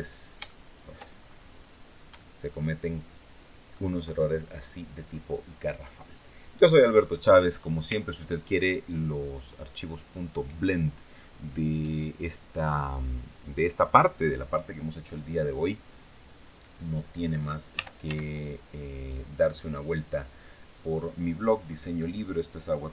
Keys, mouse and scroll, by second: 0.2 shift+middle click, 0.9-1.4 shift+scroll up 3, 1.9-3.6 shift+drag, 15.2 right click, 17.5 r, 17.8 x, 19.3 click.